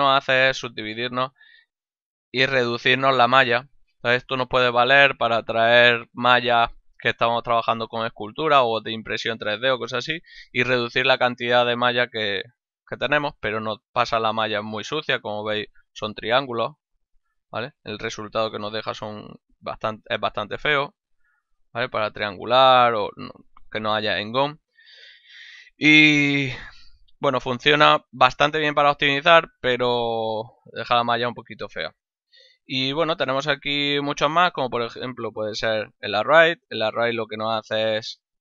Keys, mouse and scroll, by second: 2.8 middle click, 12.6 middle click, 13.5 z, 14.7 z, 16.5 Tab, 18.0 z, 21.6 click, 28.0 click, 34.7 click, 35.2 ctrl+middle click, 35.7 z, 37.2 ctrl+middle click.